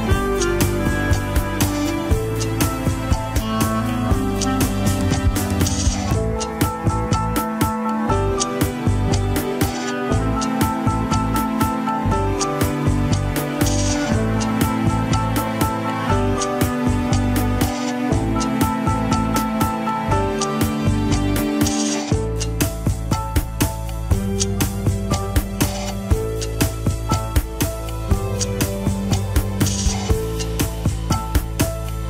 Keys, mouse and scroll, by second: 0.9 click, 2.0-2.9 drag, 2.9 s, 4.1 scroll down 5, 4.4 shift+middle click, 5.0 scroll up 3, 5.6 scroll down 5, 5.7 KP_3, 5.9-6.3 scroll up 2, 6.1 shift+middle click, 7.2 click, 7.6 scroll up 1, 7.8-8.9 shift+middle drag, 8.9-10.7 drag, 10.7 alt+z, 10.9-11.3 scroll up 3, 11.3 alt+z, 11.6 shift+middle click, 11.8 scroll up 2, 12.1 click, 12.3 g, 13.6-14.0 scroll down 11, 14.0 shift+middle click, 14.2 scroll up 2, 14.6 shift+z, 14.9 shift+middle click, 15.1 scroll up 1, 15.3 click, 15.6 g, 17.4 scroll down 1, 17.7 shift+middle click, 17.8 scroll up 1, 18.3 click, 18.5 g, 19.9 KP_1, 20.4 click, 20.6 KP_3, 21.1 click, 22.1 click, 22.3 g, 23.3 middle click, 23.8 click, 24.2 middle click, 24.6 KP_3, 25.0 click, 25.8 shift+middle click, 26.2 click, 26.6 click, 26.8 g, 27.9-28.2 scroll down 2, 28.2 g, 29.0 shift+middle click, 29.6 click, 29.8 g, 30.5-31.1 scroll down 1, 31.1 KP_1, 31.3 scroll up 2, 31.5 shift+middle click, 31.8 click.